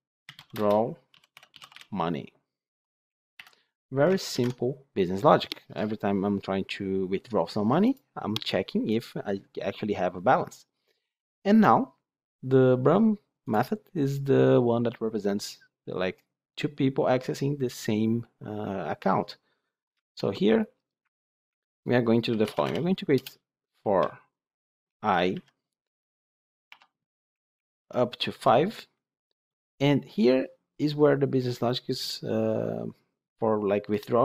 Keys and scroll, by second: 3.3 Delete, 4.2 Delete, 4.2 ctrl+alt+l, 22.1 Tab, 23.0 Tab, 23.1 Return.